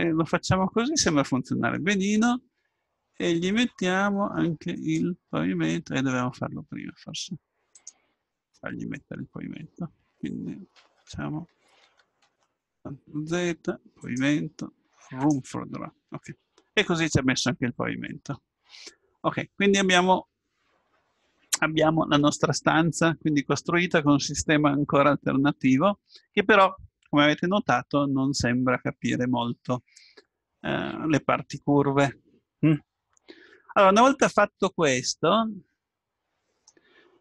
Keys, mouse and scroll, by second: 4.7-6.5 drag, 8.0-9.6 drag, 8.9-10.7 middle drag, 11.8 ctrl+z, 12.3 ctrl+z, 14.0-17.1 drag, 16.3-18.7 middle drag, 33.3-37.2 middle drag.